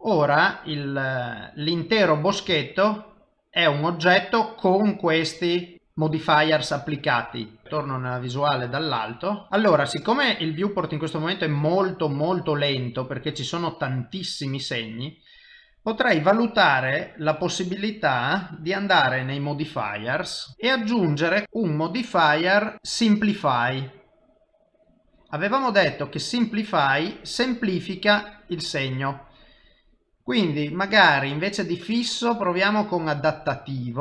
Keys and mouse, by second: 0.3 middle click, 2.9 shift+middle click, 7.6 middle click, 7.9 KP_7, 9.3 ctrl+middle click, 9.5 ctrl+middle click, 11.8 middle click, 16.8 middle click, 19.5 click, 20.5 click, 21.4 click, 26.5 middle click, 30.6 click.